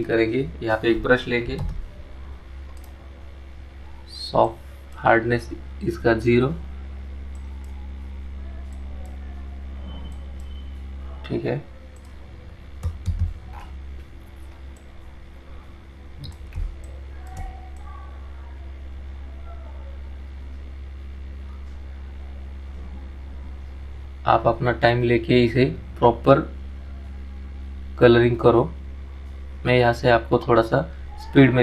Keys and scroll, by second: 16.4 ctrl+z.